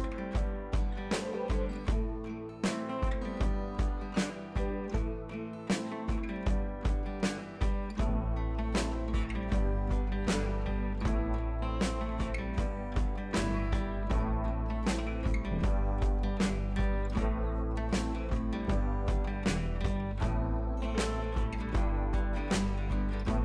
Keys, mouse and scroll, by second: 0.0 ctrl+z, 0.7 click, 1.0 scroll down 1, 1.3 scroll up 1, 2.7 click, 3.1 ctrl+t, 3.7-4.7 alt+drag, 5.5 ctrl+a, 6.1 click, 6.5 ctrl+d, 6.7 click, 7.4 t, 7.5 click, 9.9 ctrl+c, 10.1 click, 10.8 ctrl+v, 12.1 click, 13.6 click, 15.3 t, 15.6 click, 16.1 ctrl+v, 16.9 click, 17.7 click, 18.6 drag, 21.5 drag.